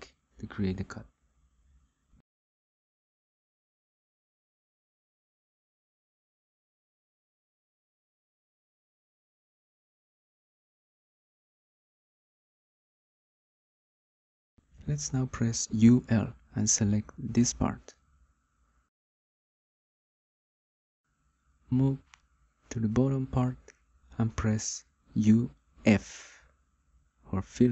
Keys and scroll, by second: 0.3 Return, 17.0 u, 17.5 l, 26.1 u, 27.4 f.